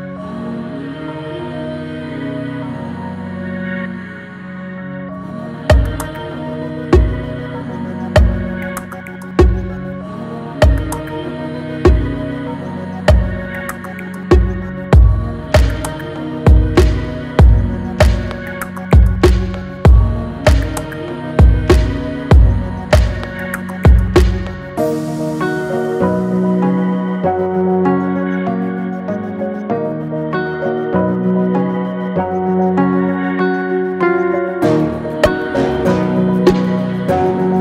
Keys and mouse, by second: 4.3-4.9 drag, 5.8 click, 8.4 click, 15.3-16.0 drag, 17.5 Delete, 28.0-29.5 drag, 34.1-37.3 drag.